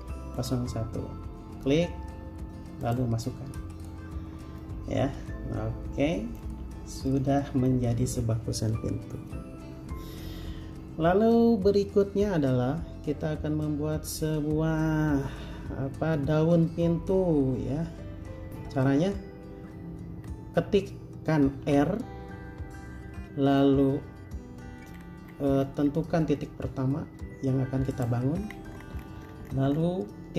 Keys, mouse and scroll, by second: 4.4 space, 4.8 middle click, 20.3-21.8 scroll up 1, 21.8 r, 27.3-28.1 scroll up 1, 28.6 scroll down 1.